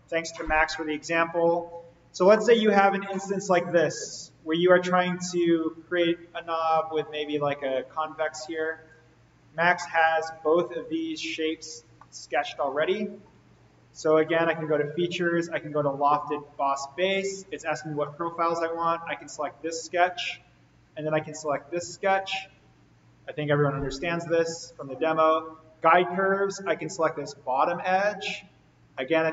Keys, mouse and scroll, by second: 2.3-6.4 middle drag, 9.3 click, 9.8-10.7 middle drag, 11.5 click, 11.9-13.2 middle drag, 13.5 click, 18.0-18.6 middle click, 19.2 click, 21.7 click, 25.9 click, 28.9-29.3 middle click, 29.0 scroll up 1.